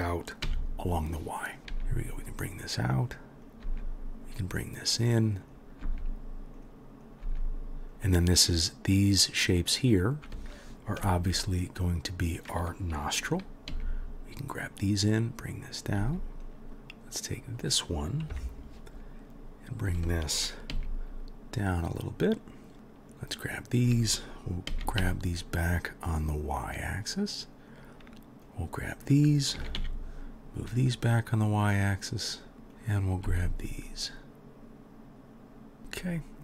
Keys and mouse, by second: 1.6 g, 1.7 g, 3.5 click, 3.5-5.4 middle drag, 3.7 g, 5.4 click, 5.5-7.0 middle drag, 5.8 g, 7.0 click, 7.1-11.1 middle drag, 7.3 g, 11.1 shift+drag, 11.3-15.7 middle drag, 13.7 g, 15.7 click, 15.8-22.8 middle drag, 16.0 g, 18.3 KP_1, 20.7 g, 22.8-27.8 drag, 24.7 g, 27.8-28.5 middle drag, 28.5-32.5 drag, 29.6 g, 32.5 middle click, 32.6 g, 32.8-35.8 drag, 33.3 g, 35.8-36.4 middle drag.